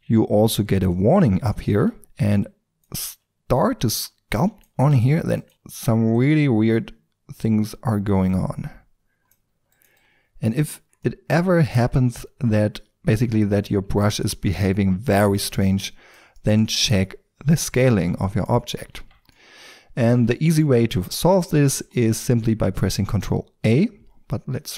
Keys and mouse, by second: 1.8 t, 2.4-3.0 drag, 3.0 x, 4.9 shift+f, 9.5 f, 10.7-12.9 drag, 12.9 f, 14.1-15.3 drag, 18.9 Tab.